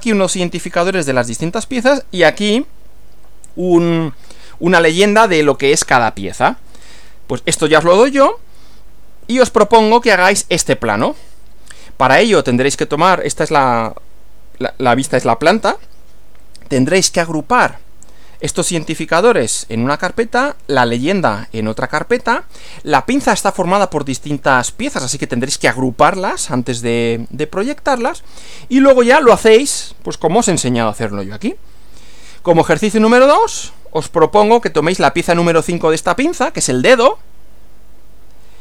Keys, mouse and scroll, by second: 9.2 Right, 31.9 Right.